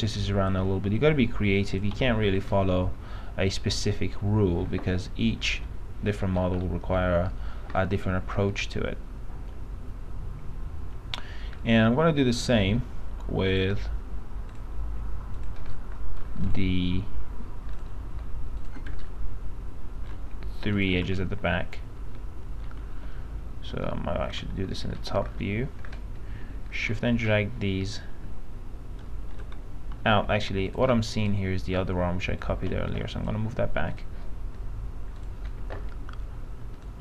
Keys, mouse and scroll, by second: 1.1 click, 2.7-4.7 alt+middle drag, 5.8 F3, 6.4 middle click, 7.5-7.9 scroll up 1, 8.7-13.1 alt+middle drag, 13.7 click, 15.9 alt+middle click, 16.7 click, 18.8 ctrl+click, 20.9 ctrl+click, 22.3 alt+middle click, 23.9 alt+t, 24.6 alt+z, 24.9 middle click, 25.0-25.5 scroll down 1, 26.9-30.0 shift+drag, 30.9 click, 35.7 click.